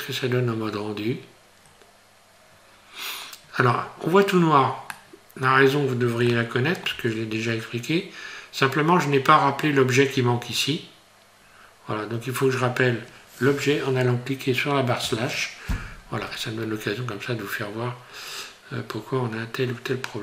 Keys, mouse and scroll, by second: 1.8 scroll down 2, 2.8 scroll down 1, 4.4 scroll down 4, 4.9 middle click, 6.3 shift+middle click, 10.0 scroll down 1, 15.0 KP_Divide, 17.4 scroll down 4.